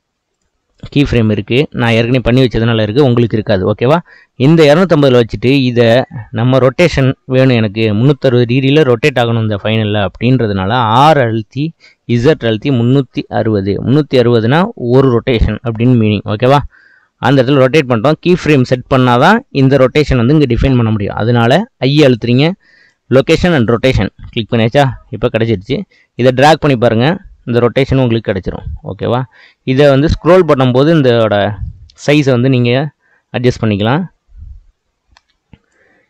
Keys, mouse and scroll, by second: 8.9 r, 21.7 i, 26.2-29.2 drag, 29.6-30.8 scroll down 3, 30.8-32.2 scroll down 4, 33.5-36.0 drag.